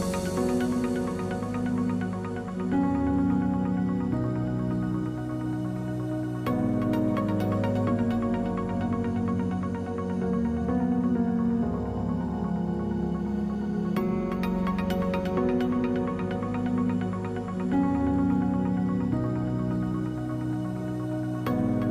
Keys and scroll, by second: 8.9 Return, 12.1 w, 14.6 3.